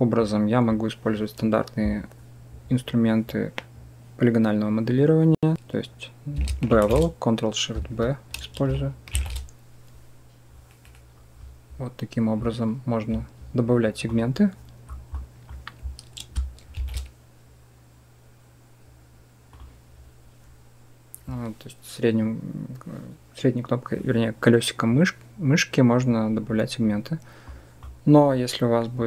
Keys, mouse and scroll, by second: 0.2 click, 6.6 ctrl+shift+b, 9.0 ctrl+shift+b, 15.1 click, 16.6 ctrl+shift+b, 27.5 click.